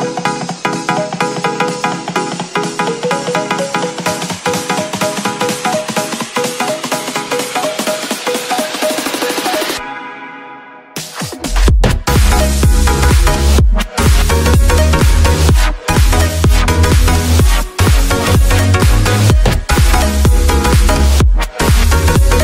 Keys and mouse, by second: 1.6 ctrl+s, 1.8 a, 1.9 a, 3.2 click, 5.0 click, 6.5 click.